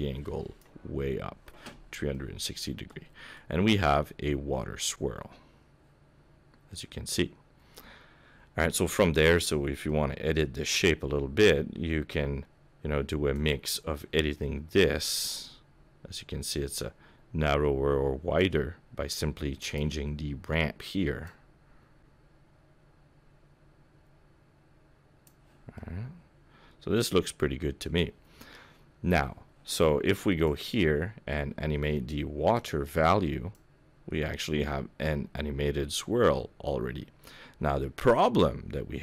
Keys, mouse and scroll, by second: 2.1 middle click, 3.0 scroll up 3, 3.3 middle click, 9.8 middle click, 13.3 click, 14.8 click, 21.2 click, 25.7 middle click, 30.4 click, 31.6 scroll up 3, 32.5 click, 33.5 click.